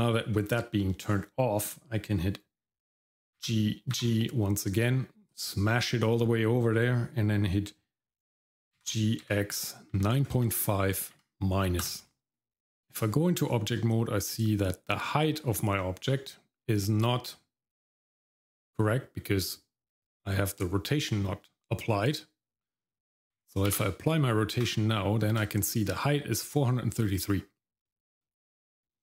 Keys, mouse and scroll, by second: 3.4 g, 8.8 g, 12.3 Tab, 12.3 shift+middle click, 12.9 middle click, 13.5 shift+middle click, 21.1 shift+middle click, 23.7 ctrl+a, 25.4 shift+middle click, 28.0 shift+middle click.